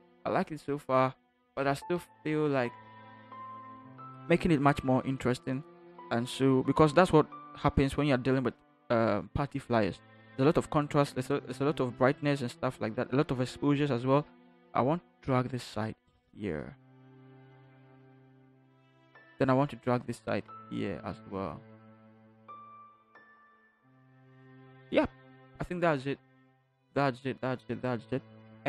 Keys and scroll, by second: 2.3 ctrl+-, 3.0 ctrl+-.